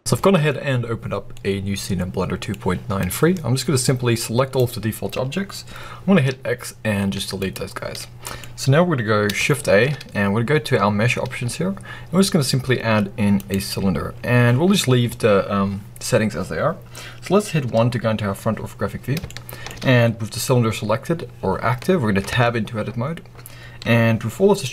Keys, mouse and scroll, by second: 0.0-2.9 middle drag, 0.0-1.2 scroll down 2, 2.9 click, 6.1 x, 7.9-18.0 middle drag, 8.3-9.5 scroll up 2, 9.5 shift+a, 14.0-17.6 scroll up 2, 17.6 KP_1, 18.5 scroll up 1, 19.1 shift+middle click, 22.3 Tab, 23.3-24.7 scroll down 1.